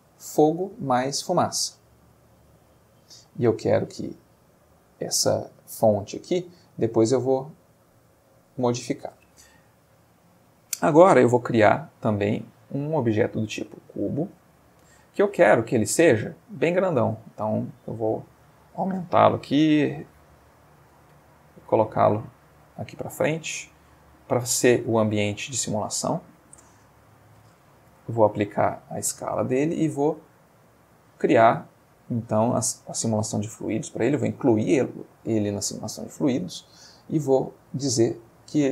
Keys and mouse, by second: 1.5 click, 3.1 middle click, 6.8 click, 9.9-10.8 ctrl+middle drag, 11.7 shift+a, 13.2 click, 13.9-15.4 ctrl+middle drag, 16.8 ctrl+middle click, 17.6 ctrl+s, 18.4 click, 19.4 s, 20.0 y, 20.9 click, 21.1 g, 22.7-26.5 drag, 23.0-26.5 middle drag, 27.9 ctrl+a, 28.6 click, 30.4 click, 35.9 click, 37.7 click.